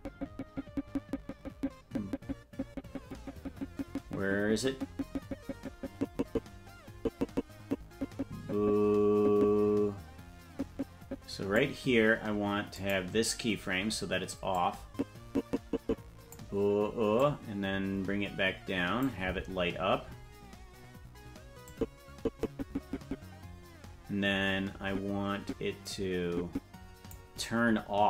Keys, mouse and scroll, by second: 0.0-12.0 drag, 13.1 click, 15.1-16.5 drag, 17.7-19.4 drag, 21.8-27.3 drag.